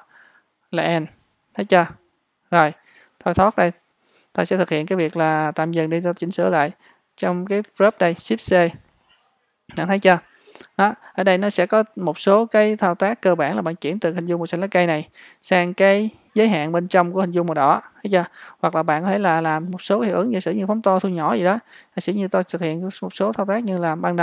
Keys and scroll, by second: 5.1 space.